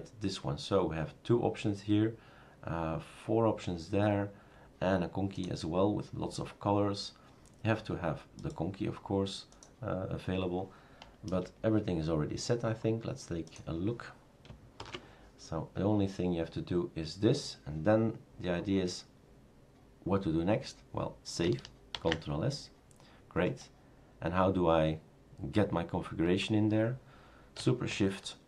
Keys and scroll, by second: 11.3 BackSpace, 14.8 #, 22.0 ctrl+s.